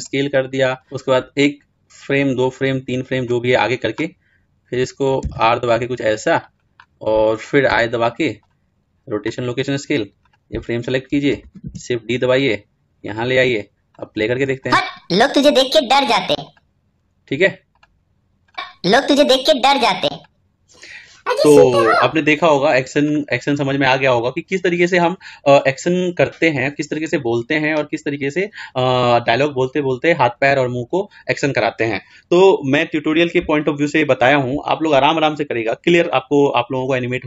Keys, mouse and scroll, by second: 0.0 i, 0.2 ctrl+z, 1.6-6.1 drag, 6.1 r, 8.2 i, 9.9 click, 11.4 shift+d, 13.8-19.7 drag, 22.1-37.2 drag.